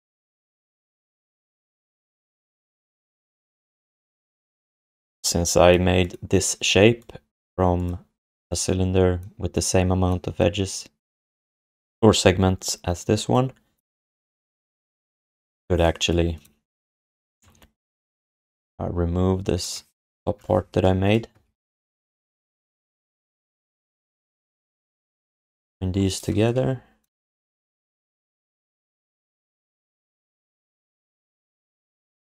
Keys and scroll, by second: 0.2 alt+shift+d, 2.1 q, 17.4 Tab, 21.4 alt+d, 25.6 alt+shift+d.